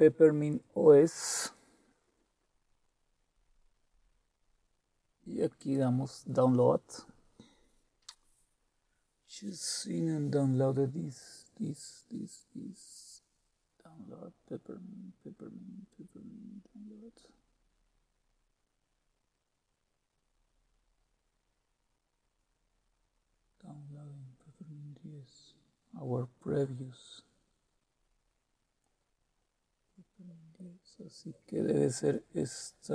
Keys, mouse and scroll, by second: 3.2-4.3 scroll down 2, 4.3-5.6 scroll down 1, 5.6 click, 13.3-15.5 scroll down 2, 15.5-17.9 scroll down 2, 18.2-21.7 scroll up 2, 21.7-23.1 scroll up 1, 23.1-26.3 scroll down 3, 26.3-28.2 scroll down 2, 28.2-30.2 scroll down 3, 30.2-30.5 scroll up 2, 30.5-30.9 scroll down 1, 30.9-32.9 scroll up 5.